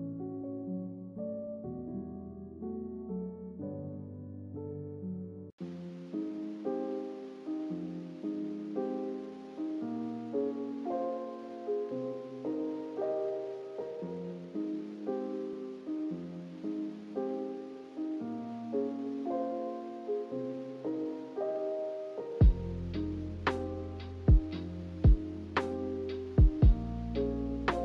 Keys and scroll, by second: 15.7-17.0 typing.